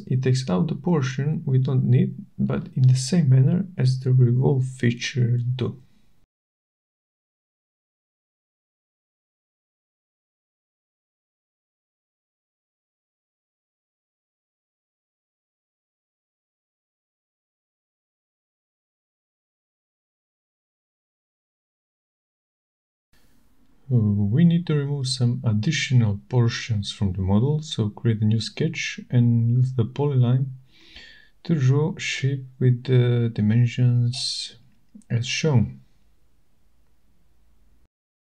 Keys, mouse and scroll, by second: 1.7 click, 2.2 click, 2.9 shift+right click, 4.0 middle click, 4.6 shift+right click, 6.4 shift+right click, 9.7 middle click, 10.2 shift+right click, 11.4 middle click, 12.4 click, 12.4 right click, 13.8 click, 14.7 middle click, 16.6 scroll, 16.7 click, 18.2 click, 19.6 click, 21.7 click, 23.7 click, 25.0 middle click, 25.0-25.5 scroll, 26.0-26.7 scroll, 28.4 scroll, 29.8 click, 30.7 click, 31.3-31.8 scroll, 34.2 scroll, 37.6 click.